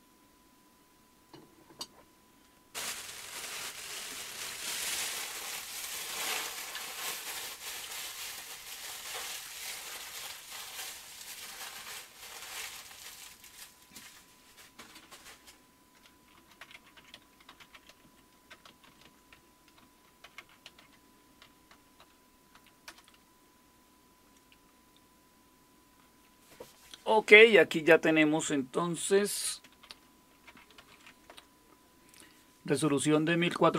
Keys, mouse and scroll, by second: 16.1-22.5 typing, 22.9 Return, 29.2 super+Return, 30.2-31.4 typing.